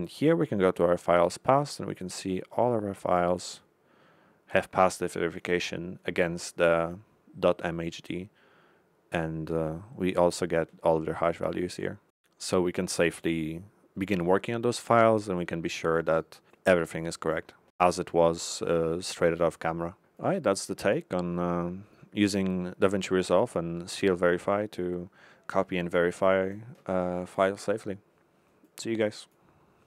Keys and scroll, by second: 5.9 Left, 11.5 Left, 15.2 Left.